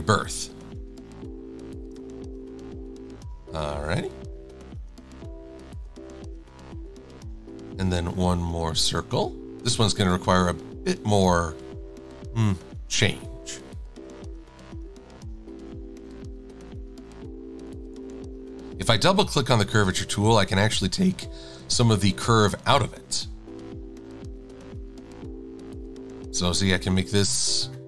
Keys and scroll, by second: 0.3 shift+x.